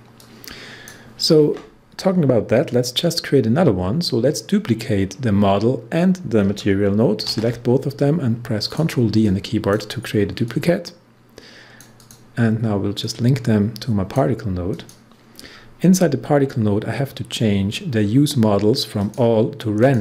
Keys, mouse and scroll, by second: 0.1-3.4 drag, 6.4 ctrl+Num_Lock, 6.4 click, 7.2 ctrl+d, 8.6-14.7 drag, 15.3 scroll down 1, 19.0 click.